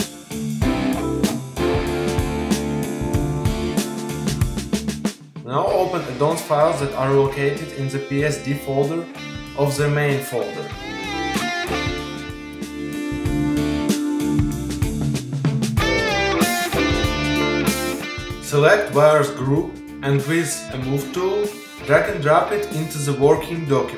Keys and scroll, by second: 1.6 super+0.